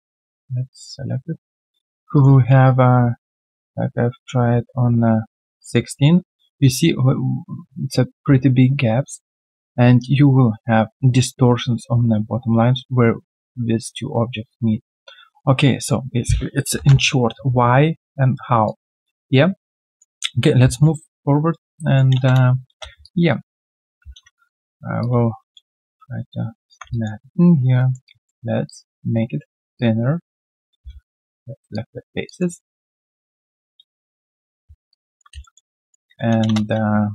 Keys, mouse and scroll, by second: 2.5 middle click, 15.1 middle click, 16.4-17.2 typing, 21.7 alt+middle click, 22.1 space, 22.6 space, 23.0 alt+click, 24.0 alt+w, 24.1 typing, 26.1-26.7 typing, 26.9 alt+click, 27.4 alt+right click, 29.5-30.4 typing, 30.8 right click, 32.2 alt+click, 33.0 ctrl+click, 34.2 shift+click, 35.4 alt+middle click, 35.7 alt+click.